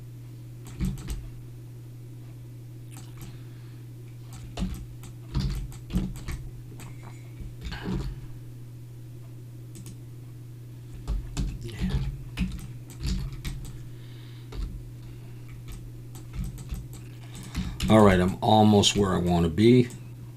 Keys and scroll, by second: 4.6 Tab, 5.4 alt+a, 7.9 ctrl+r, 11.4 Escape, 11.9 ctrl+z, 12.4 Tab, 13.1 alt+a, 14.5 /, 17.5 Tab.